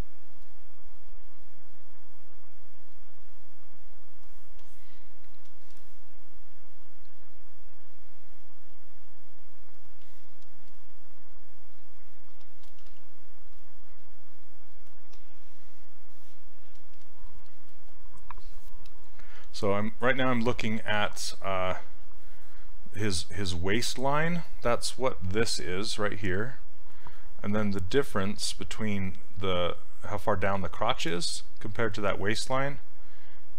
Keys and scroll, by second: 12.9 s.